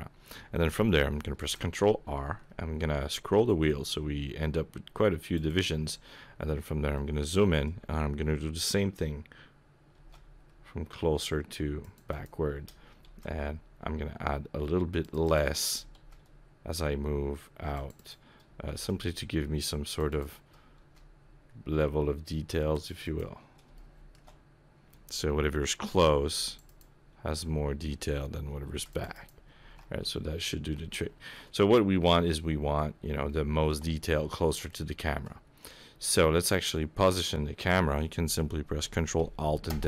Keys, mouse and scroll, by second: 1.4 ctrl+r, 6.2-6.8 scroll up 5, 6.9 shift+middle click, 10.2 ctrl+r, 13.1 ctrl+r, 16.0 ctrl+r, 18.7 ctrl+r, 20.8 ctrl+r, 23.7 shift+middle click, 26.2 ctrl+r, 28.7 ctrl+r, 29.7 alt+a, 30.0-30.9 scroll down 5, 30.9 shift+middle click, 31.5 scroll up 3, 32.0 middle click, 32.9 scroll up 2, 33.3 shift+middle click, 33.9 scroll up 2, 34.1 middle click, 34.9 shift+middle click, 35.6 middle click, 35.9 scroll up 1, 39.7 ctrl+alt+KP_0.